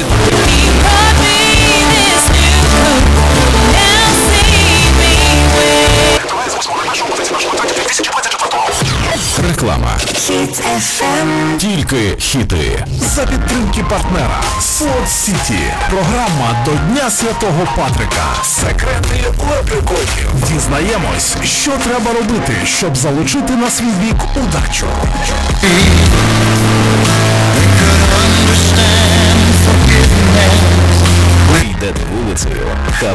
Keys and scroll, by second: 6.5 Page_Down.